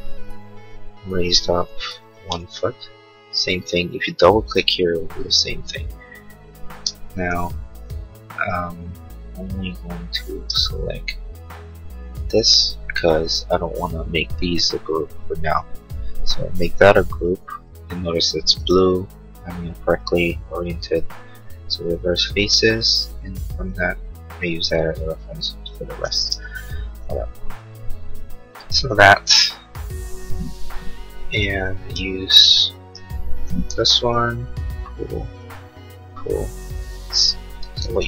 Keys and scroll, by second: 37.8 ctrl+z.